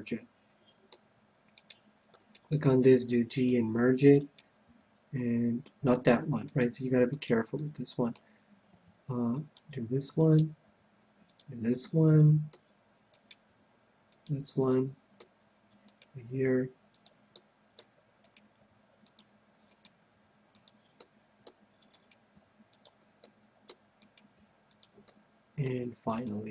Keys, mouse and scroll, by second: 0.0-1.7 middle drag, 2.1-3.4 right drag, 2.7 g, 3.4-5.1 drag, 4.2-5.9 right drag, 4.7 g, 7.1-8.8 right drag, 7.5-9.3 middle drag, 8.6 g, 9.5-13.1 drag, 10.1-12.0 right drag, 10.6 g, 11.7 middle click, 12.5 middle click, 13.1-14.9 right drag, 13.5 g, 14.2-15.9 drag, 14.6-16.4 middle drag, 15.8-17.6 right drag, 16.4 g, 17.0-18.9 drag, 17.5-19.1 middle drag, 18.2-21.4 right drag, 18.5 g, 19.1-21.4 drag, 20.0 g, 20.9 middle click, 22.3 g, 23.0 g, 23.2-24.5 middle drag, 24.2 g, 25.2-26.5 drag, 25.2-26.5 middle drag, 25.2 right click, 26.2 right click.